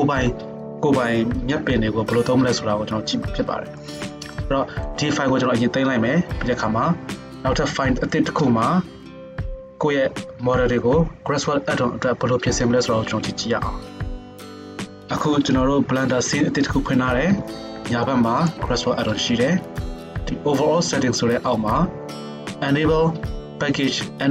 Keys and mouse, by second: 17.3 n, 18.5-19.8 middle drag, 19.8-24.3 drag.